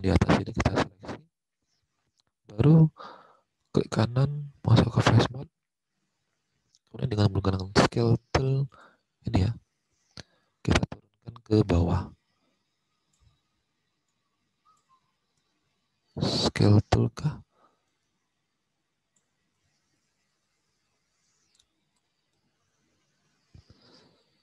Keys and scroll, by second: 7.3 alt+Tab, 19.5 ctrl+z.